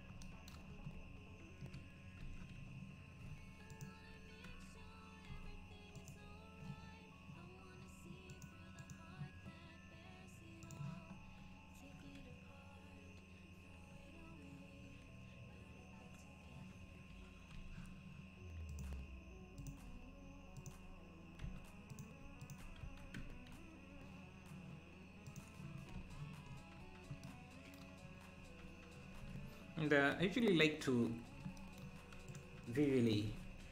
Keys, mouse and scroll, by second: 0.6 Tab, 1.6 KP_Divide, 2.2 Tab, 3.7-5.3 ctrl+drag, 5.3 x, 8.3-11.3 drag, 11.3 scroll up 1, 18.7-21.4 drag, 21.4 f, 21.9 click, 22.8 f, 23.2 Tab, 23.5 `, 25.2 click, 26.0 ctrl+s, 26.5 scroll up 6, 28.1 scroll down 3, 29.2 ctrl+s, 29.4-29.7 scroll down 2, 30.1 scroll down 2, 30.2 KP_Divide, 31.1 KP_1, 32.3 click, 32.6 scroll down 4, 33.3 g.